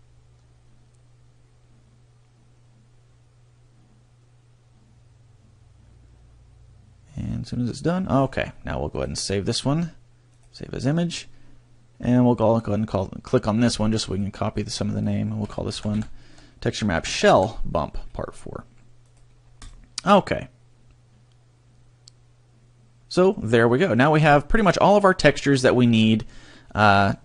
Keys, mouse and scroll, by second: 12.8 middle click, 14.2 click.